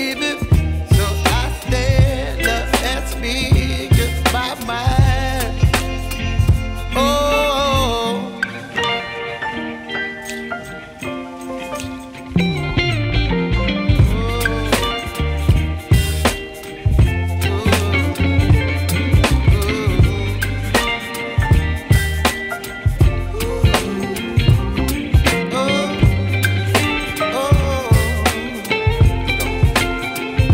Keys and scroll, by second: 7.9 5, 8.2 Return, 12.4 ctrl+k, 14.5 Escape, 15.7 ctrl+z, 20.1 Delete, 20.5 ctrl+z, 30.3 space.